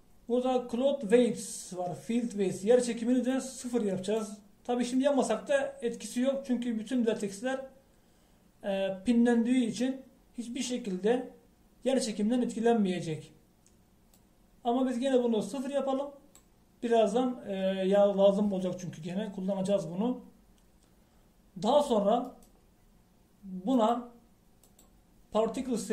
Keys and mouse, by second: 0.8-13.9 drag, 15.2-17.0 drag, 20.8-23.3 middle drag, 23.3-25.1 right drag, 24.8-25.9 drag.